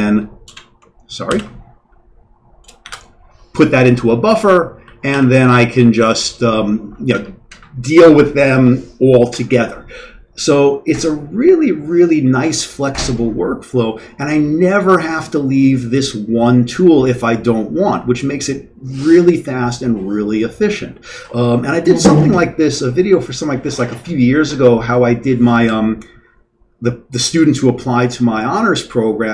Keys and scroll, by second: 1.3 ctrl+., 2.8 shift+s, 5.1 q.